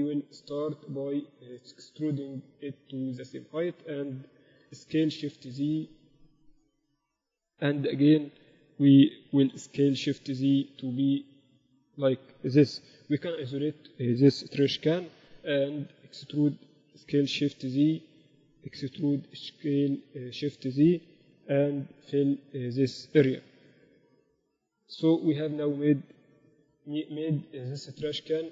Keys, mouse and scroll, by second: 2.5-4.2 drag, 4.8 s, 7.2 a, 7.8 b, 9.8 s, 13.2 KP_Divide, 15.1-17.2 typing, 19.0 e, 21.4 ctrl+KP_7, 21.9 z, 22.0 z, 22.5 z, 23.8 f, 24.3-26.4 drag, 25.6 j.